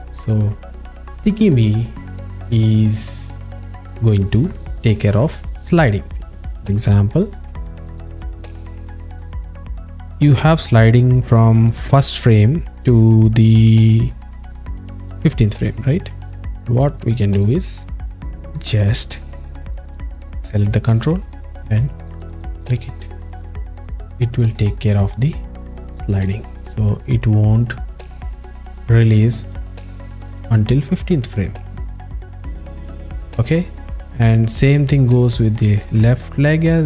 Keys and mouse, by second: 3.1-3.5 alt+shift+middle drag, 3.7 ctrl+alt+middle click, 5.6-6.0 alt+middle drag, 6.7 click, 7.5 alt+shift+middle click, 8.5 click, 21.8 click, 22.0 click, 22.6 click, 22.8 click, 23.0 click, 23.2 click, 23.4 click, 23.9 click, 24.1 click, 24.3 click, 24.5 click, 26.0 click, 36.2 alt+shift+middle click.